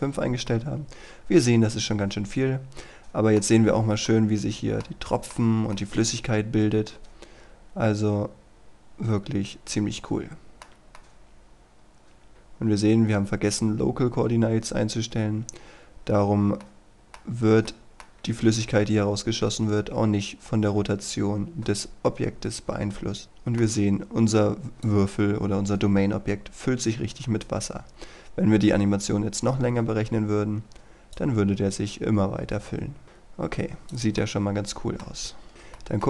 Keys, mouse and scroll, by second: 0.6-3.6 middle drag, 3.6-4.2 scroll down 1, 4.2 middle click, 5.6 scroll up 1, 5.8-12.3 middle drag, 16.2-16.7 scroll up 1, 16.7 middle click, 17.3-17.7 scroll down 1, 17.7-24.4 middle drag, 24.8-34.2 drag, 34.2-35.3 middle drag, 35.5 click, 35.8 middle click.